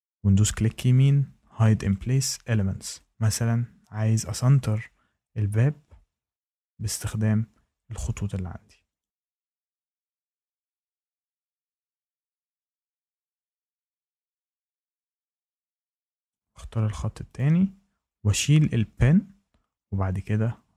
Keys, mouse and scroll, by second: 1.0 click, 1.8 click, 3.1 click, 7.0 click, 8.9 click, 10.0 click, 14.2 click, 15.2 click, 16.2 click, 17.3 click.